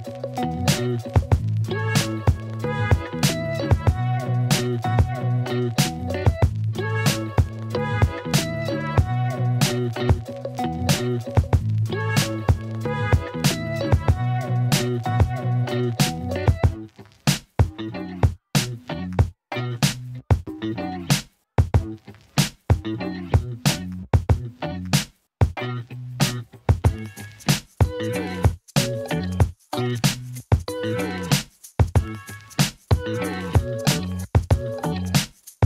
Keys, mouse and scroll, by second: 0.5 e, 0.6 y, 2.0 s, 3.1 e, 3.6 y, 4.9 s, 6.7-7.9 alt+drag, 8.1 f, 8.5 alt+click, 9.0 ctrl+alt+click, 9.2 KP_1, 10.1 g, 10.2 z, 18.6 click, 19.4 Tab, 19.8 Tab, 20.1 click, 20.5 ctrl+click, 23.2 alt+middle click, 23.4 alt+click, 23.4 alt+middle click, 23.6 alt+click, 23.6 alt+middle click, 23.7 alt+click, 25.0 ctrl+b, 33.3-34.4 alt+middle drag, 34.6 Tab, 34.9 alt+click, 35.1 ctrl+alt+click, 35.3 alt+drag, 35.5 alt+middle click.